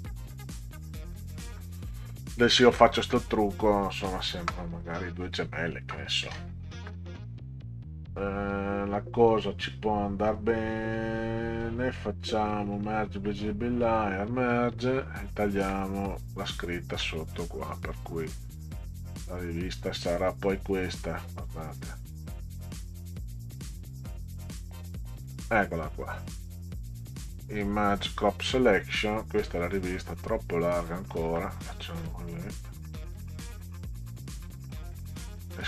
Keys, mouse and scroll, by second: 10.4 right click, 12.8 click, 13.9 click, 18.2 click, 19.5-24.8 drag, 26.9 click, 28.1 click, 29.6 scroll up 2, 30.8-35.6 drag.